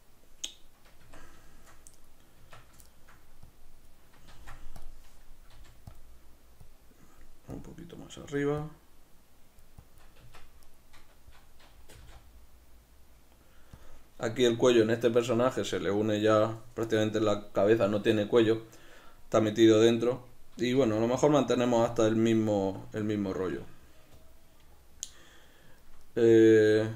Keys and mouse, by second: 1.0 Tab, 1.9 right click, 2.4 Tab, 2.5 b, 2.8 shift+middle click, 3.4 click, 4.3 ctrl+z, 4.8 click, 6.0 click, 10.2 b, 10.3 Tab, 10.3 click, 10.6-11.9 right drag, 11.9 g, 13.9 click, 15.2-26.9 shift+middle drag.